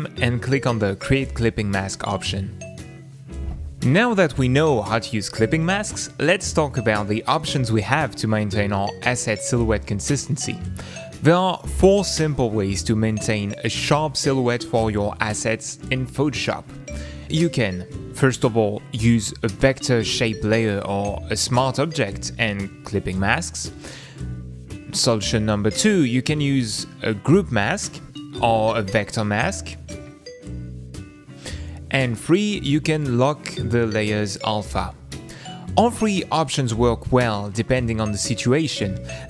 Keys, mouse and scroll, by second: 1.2 click.